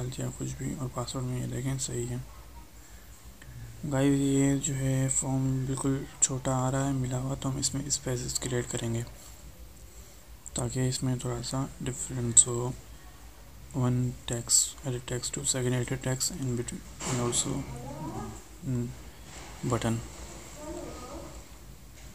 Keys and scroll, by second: 19.0 ctrl+shift+Right.